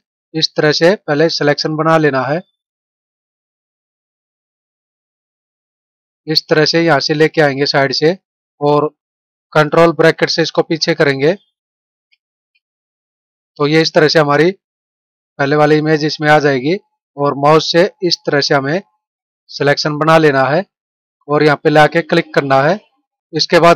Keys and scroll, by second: 10.7 ctrl+[, 12.0 ctrl+].